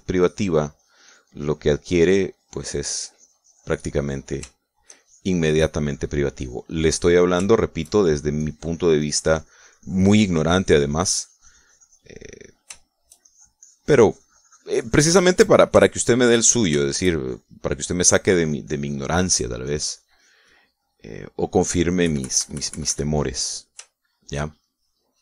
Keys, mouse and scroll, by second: 0.2-5.3 drag, 5.5 shift+middle click, 5.9-8.3 shift+drag, 8.4 shift+middle click, 9.7-13.7 shift+drag, 13.7 shift+middle click, 14.2-16.8 shift+drag, 16.9 shift+click, 18.3 shift+click, 18.8-20.3 shift+drag, 20.7 click, 21.5 click, 22.1 click, 23.0 KP_Subtract, 24.3 click, 24.9 shift+click.